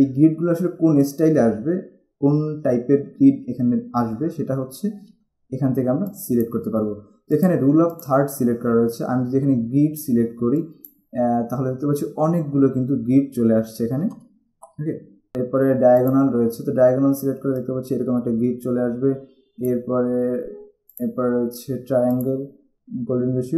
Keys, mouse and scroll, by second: 6.2 click, 10.7 click, 16.2 click, 17.7 click, 21.1 click, 22.4 click.